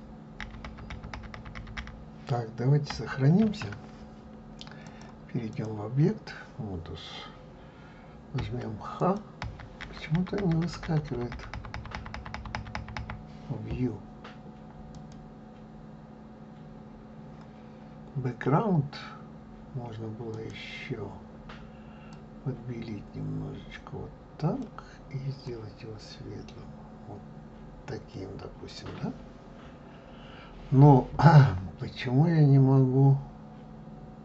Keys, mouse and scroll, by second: 5.9-9.4 drag, 15.0 click.